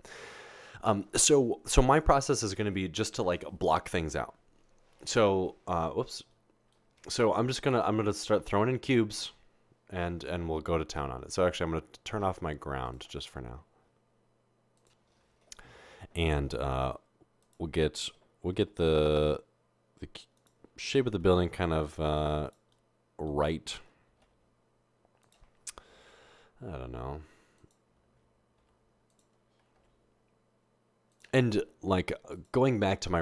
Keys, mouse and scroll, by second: 7.2 a, 18.7 typing, 21.2 typing, 24.1 typing, 25.9-26.7 typing, 28.6 typing, 29.8 typing.